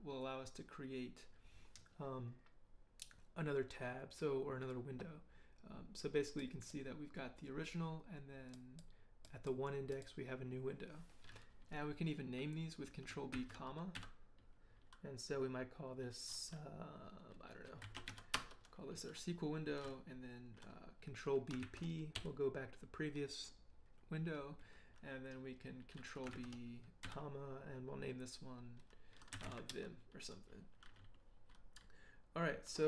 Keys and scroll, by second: 13.3 ctrl+b, 13.9 ,, 17.6-18.5 typing, 21.6 ctrl+b, 22.1 ctrl+p, 26.3 ctrl+b, 29.1-29.9 typing.